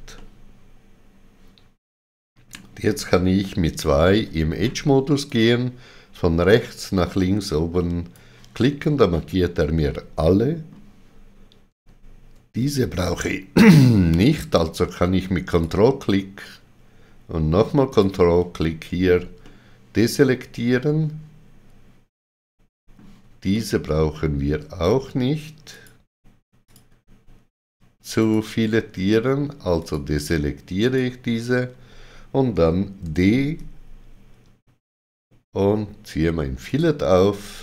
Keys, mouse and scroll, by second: 3.5 2, 5.2 click, 9.8 middle click, 15.5 ctrl+click, 17.9 ctrl+click, 17.9 ctrl+click, 19.4 middle click, 23.5 middle click, 25.7 ctrl+click, 26.7 ctrl+click, 33.1 d, 36.7 shift+click.